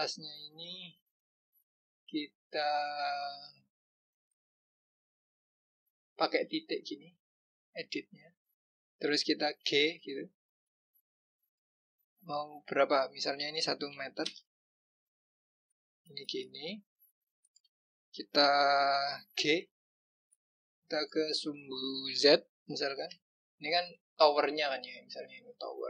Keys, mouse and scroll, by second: 0.5 click, 6.4 click, 7.8 click, 9.7 g, 17.4 click, 19.3 g, 24.0-25.8 scroll down 2.